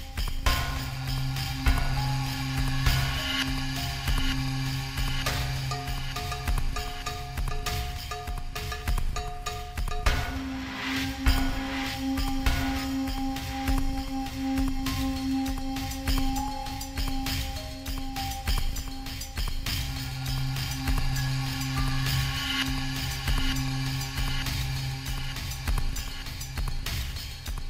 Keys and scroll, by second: 2.6 alt+shift+Return, 3.1 space, 12.6-16.4 typing, 17.3 Delete, 18.7 ctrl+a, 24.4-25.7 typing.